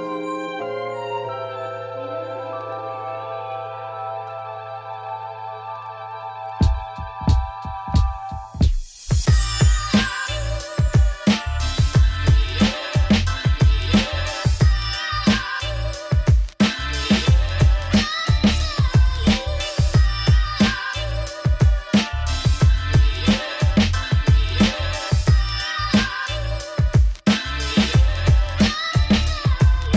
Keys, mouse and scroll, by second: 0.0 middle click, 0.2 Tab, 0.3 2, 0.8 scroll up 1, 1.7 shift+middle click, 2.0 g, 3.0 click, 3.1 shift+middle click, 4.0 g, 4.9 click, 5.3 scroll down 3, 5.4 Tab, 5.6 middle click, 6.4 scroll down 1, 6.5 middle click, 6.8 r, 7.9 shift+click, 8.0-9.2 middle drag, 10.2 middle click, 10.4 click, 10.5 middle click, 10.6 scroll down 4, 10.8 middle click, 11.1 click, 11.2 s, 15.1 scroll down 7, 15.3 click, 15.5 scroll up 3, 15.7 shift+middle click, 16.7 scroll down 1, 17.0-17.5 scroll up 1, 17.5 click, 17.8 s, 19.1 shift+middle click, 19.3 scroll up 2, 19.5 shift+right click, 20.4 shift+a, 20.7 Tab, 20.8 s, 23.3 alt+click, 23.4 ctrl+b, 25.5 Tab, 25.9 ctrl+2, 26.8 right click, 26.9-28.0 scroll up 2, 28.0-29.9 drag.